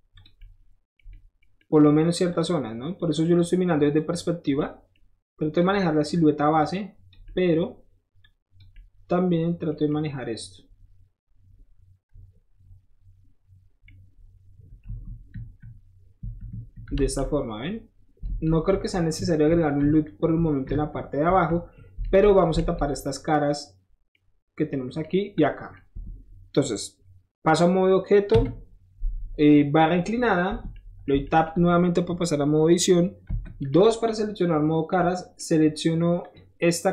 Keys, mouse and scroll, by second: 0.2 click, 1.0 middle click, 1.4 middle click, 1.8 middle click, 2.3 click, 3.0 click, 4.0 click, 4.6 middle click, 5.5 click, 5.7 middle click, 6.6 click, 7.2 middle click, 8.2 click, 8.7-9.8 middle drag, 9.8 middle click, 9.9-13.9 middle drag, 15.0 KP_1, 15.3 KP_3, 16.2 KP_1, 16.5 KP_3, 17.0 alt+z, 18.3 alt+z, 18.7-21.2 typing, 22.1 alt+z, 22.6 alt+z, 24.1 middle click, 25.4-25.8 middle drag, 26.0 Tab, 28.4 KP_Divide, 29.5-30.7 middle drag, 30.5 Tab, 31.1 middle click, 31.1 shift+Tab, 31.5-33.7 middle drag, 33.3 2, 33.7-34.1 scroll up 1, 35.0-35.4 scroll up 1, 36.2 click.